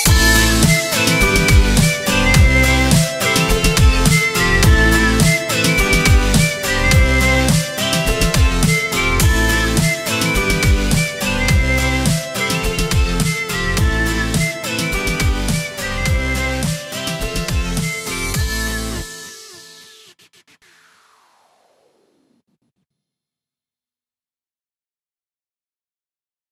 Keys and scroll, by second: 0.2 z, 1.2 space, 2.2 space, 5.1 v.